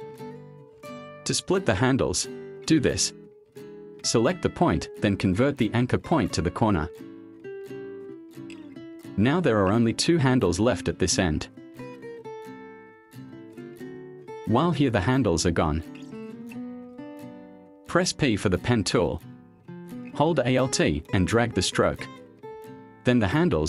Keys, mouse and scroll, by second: 0.3 click, 0.5 click, 0.7 click, 1.0 click, 1.7 click, 2.4 click, 2.6 click, 4.3 drag, 4.5 click, 8.0 click, 13.4 click, 16.2 click, 18.3 p.